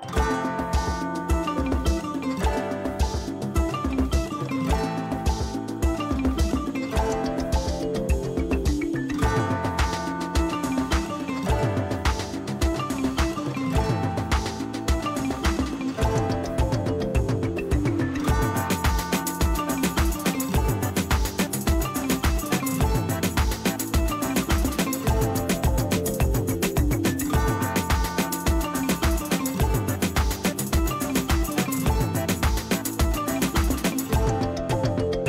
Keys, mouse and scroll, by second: 7.7 click, 32.7 ctrl+space, 33.0 ctrl+click, 33.3-33.7 ctrl+space, 34.1 space, 34.6 space.